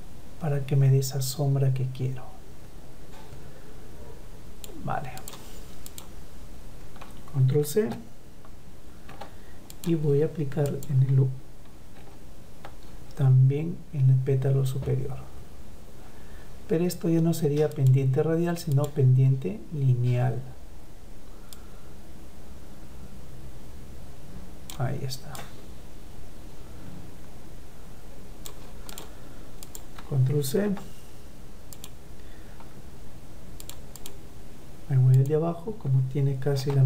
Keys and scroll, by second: 8.1 ctrl+c, 10.5 ctrl+v, 29.8 ctrl+c, 35.3 ctrl+v.